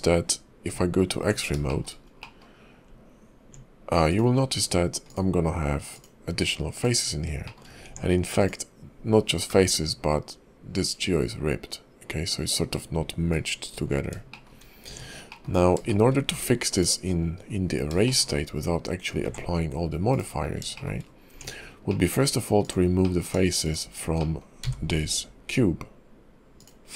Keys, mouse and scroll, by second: 0.7 Tab, 1.7 shift+middle click, 2.2 middle click, 2.9 Tab, 4.1 click, 5.0 click, 6.7 click, 7.4 shift+middle click, 7.8 Tab, 8.4 click, 9.5 g, 13.6-14.2 scroll down 9, 14.3 shift+middle click, 14.6 shift+scroll up 2, 14.8 Tab, 15.3 middle click, 15.5 scroll up 2, 15.8 shift+middle click, 16.7 click, 17.4 scroll up 4, 18.0 shift+middle click, 18.3-19.2 scroll down 2, 19.2 scroll down 1, 19.3 ctrl+`, 20.5 scroll up 2, 20.7 shift+middle click, 21.3 Tab, 21.9 middle click, 22.6 click, 23.0 middle click, 23.6 shift+click, 24.2 middle click, 24.6 x.